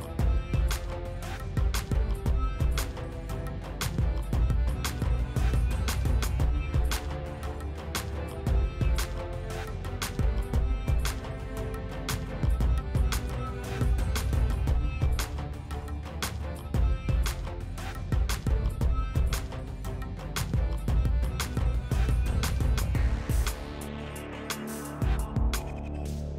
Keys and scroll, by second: 3.9 s, 4.5 s, 10.2 s, 12.0 s, 20.2 s, 22.9 s.